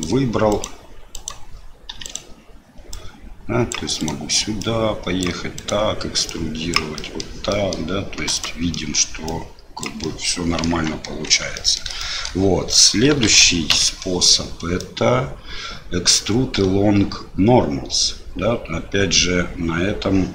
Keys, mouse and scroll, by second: 0.5 click, 1.1 click, 1.9 3, 2.0 click, 2.9 click, 3.9 click, 4.6-5.7 drag, 6.2 click, 7.1 middle click, 7.6 middle click, 8.2 click, 8.7 middle click, 9.3 click, 10.2 middle click, 10.7 Tab, 11.3 Tab, 11.5 middle click, 12.0 shift+middle click, 13.2 alt+a, 13.7 l, 14.7-20.3 drag.